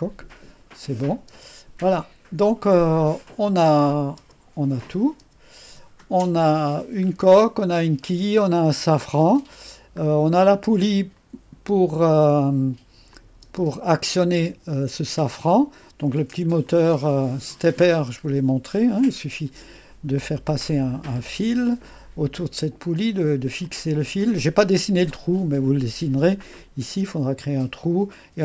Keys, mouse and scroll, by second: 1.3 space, 3.2 click, 3.7 space, 4.2 space, 4.9 click, 5.3 space, 6.1 click, 9.1-10.4 drag, 10.1-10.6 scroll up 1, 12.2 middle click, 13.5 space, 16.7 click, 21.3 click, 21.6 click, 23.7-24.7 drag, 24.7-25.2 scroll up 2, 25.2-28.4 right drag.